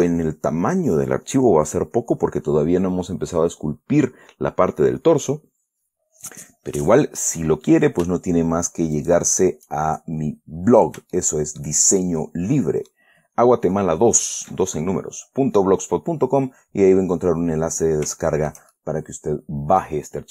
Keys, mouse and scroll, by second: 9.3 shift+click, 10.6-11.0 scroll up 2, 11.5 shift+middle click, 12.4-13.4 shift+middle drag, 16.4-17.0 scroll down 2, 18.5 shift+middle click, 19.4 click.